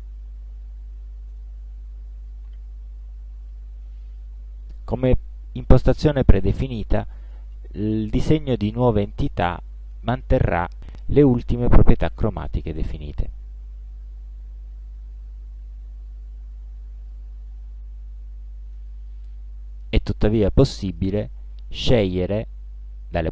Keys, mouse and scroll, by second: 1.4 space, 2.4 click, 9.3 click, 15.3-17.4 drag, 18.8 space, 21.0 click.